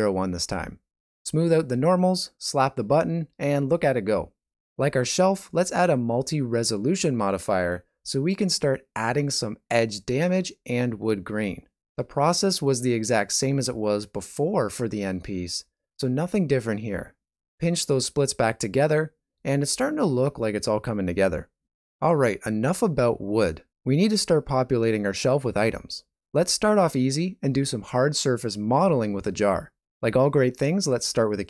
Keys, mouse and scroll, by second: 1.6 click, 5.7 middle click, 7.3 middle click, 7.7 click, 9.3 click, 10.7 middle click, 11.3 shift+middle click, 12.2 click, 13.8 click, 14.9 ctrl+middle click, 15.7 click, 16.2 click, 17.0 click, 17.1 click, 17.4 click, 18.0 shift+middle click, 18.3 middle click, 18.6 click, 19.8 click, 20.3 ctrl+middle click, 20.5 middle click, 20.8 shift+middle click, 21.1 middle click, 21.7 shift+middle click, 22.0 middle click, 22.4 ctrl+middle click, 22.6 shift+middle click, 23.2 click, 24.2 click, 25.1 shift+middle click, 25.3 click, 25.4 middle click, 25.9 shift+a, 28.0 click, 28.4 middle click, 30.5 click.